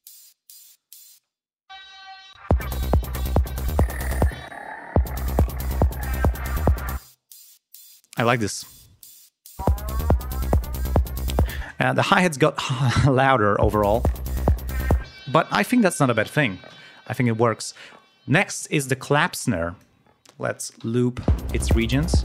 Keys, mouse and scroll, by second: 1.2 space, 1.7 click, 2.3 click, 2.5 space, 4.3 space, 4.4 click, 5.0 space, 7.0 click, 9.6 click, 11.1 scroll up 2, 11.7 space, 11.9 scroll up 1, 12.7 click, 13.6 space, 15.0 space, 15.3 scroll down 1, 16.7 ctrl+alt+p, 19.3 click, 21.2 l, 21.9 ctrl+scroll down 2.